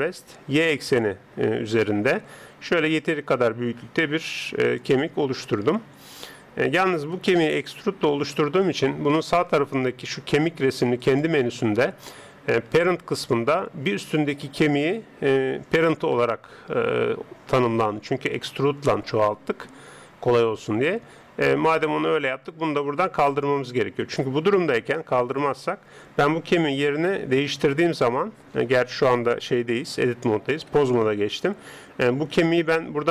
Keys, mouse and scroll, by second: 7.1 right click, 11.0 click, 26.5 g, 30.7 Tab, 31.7 g.